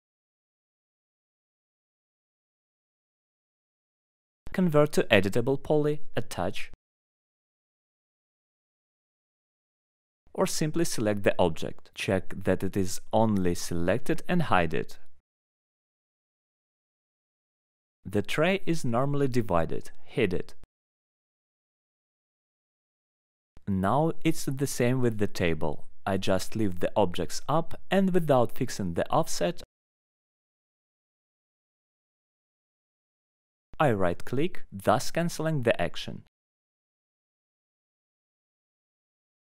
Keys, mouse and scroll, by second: 0.0 right click, 0.4 ctrl+click, 1.9 right click, 2.0 click, 2.6 click, 3.2 alt+middle click, 3.4 scroll down 1, 3.8 right click, 6.1 click, 6.6 right click, 7.7 click, 8.9 right click, 10.1 click, 10.6 click, 11.8 click, 12.4 middle click, 13.0 ctrl+click, 13.4 ctrl+click, 15.4 right click, 15.5 click, 17.2 alt+middle click, 17.8 click, 18.5 alt+middle click, 19.2 ctrl+right click, 19.9 ctrl+right click, 21.2 ctrl+right click, 21.7 ctrl+right click, 23.5 click, 24.3 alt+middle click, 25.2 ctrl+click, 27.0 right click, 27.1 click, 28.7 click, 29.5 ctrl+click, 31.2 ctrl+click, 31.8 ctrl+click, 33.3 alt+middle click, 34.9 click, 35.4 alt+middle click, 36.4 click, 36.9 middle click, 37.7 ctrl+click, 38.6 ctrl+click.